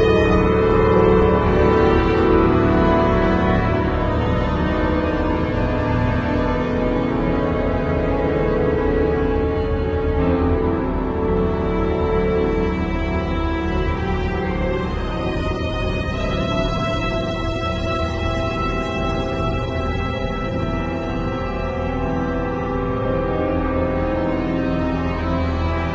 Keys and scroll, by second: 2.6 super+i, 3.2 b, 5.7 [, 7.4 [, 8.3 ], 9.1 [, 10.7 ], 11.8 [, 12.6 v, 13.2 z, 13.8 v, 15.8 super+g, 17.3-21.6 typing, 21.8 Return.